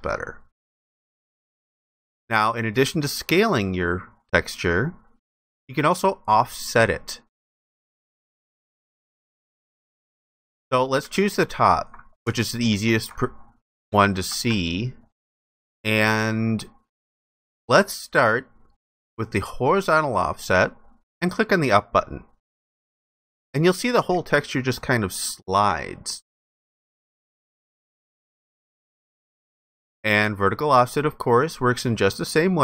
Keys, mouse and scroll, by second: 11.0 alt+click, 12.3 alt+click.